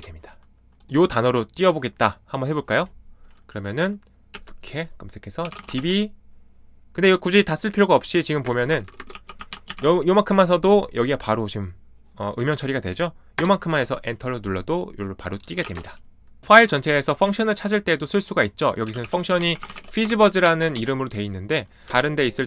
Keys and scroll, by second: 4.3-6.2 typing, 8.4-10.2 typing, 13.3 Return, 15.3-16.2 typing, 18.6-20.9 typing, 21.8 Escape, 21.8 ctrl+d.